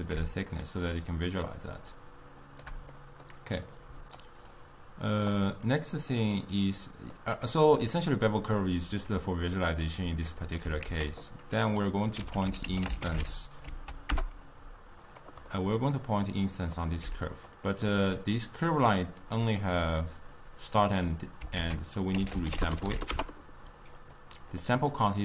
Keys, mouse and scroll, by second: 1.6-15.1 shift+drag, 24.1 ctrl+a.